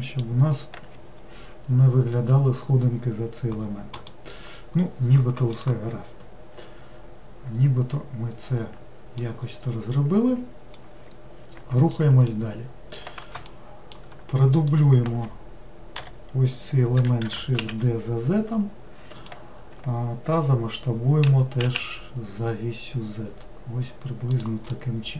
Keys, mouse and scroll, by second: 3.1-4.0 scroll down 1, 4.0 click, 9.2-14.7 middle drag, 14.7 click, 16.0 l, 17.3 shift+d, 21.3 s, 24.8-25.1 middle drag.